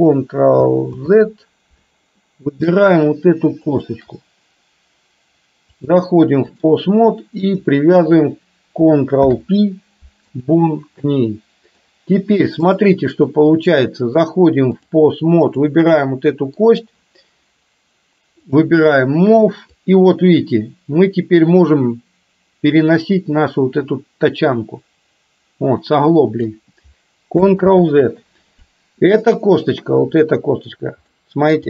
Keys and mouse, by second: 1.1 ctrl+z, 2.3-2.8 middle drag, 5.9 click, 9.2 ctrl+p, 11.1 middle click, 14.2-14.9 drag, 15.6 click, 16.1 middle click, 18.6 click, 20.1-26.6 drag, 27.8 ctrl+z, 29.3 click, 30.3-30.7 middle drag, 31.2-31.6 middle drag.